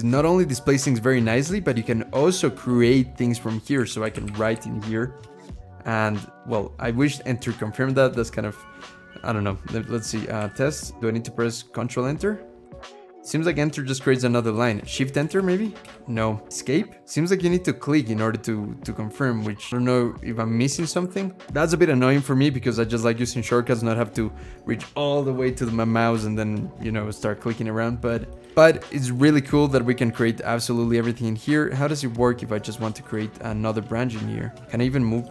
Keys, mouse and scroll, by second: 3.3-5.5 typing, 10.0-10.9 typing, 12.4 Return, 12.8 Return, 13.1 Return, 13.2 Return, 13.4 Return, 13.8-14.5 typing, 15.1 shift+Return, 15.6 shift+Return, 15.6 BackSpace, 20.6-22.0 typing, 21.4 Return.